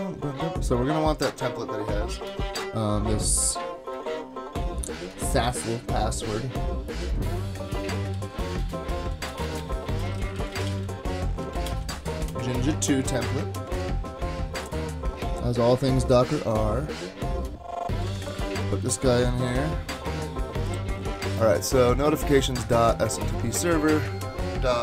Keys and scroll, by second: 2.3 super+Tab, 5.0 super+Tab, 7.8-12.5 typing, 13.7 super+Tab, 17.9 super+c, 18.1 super+Tab, 19.5 super+v.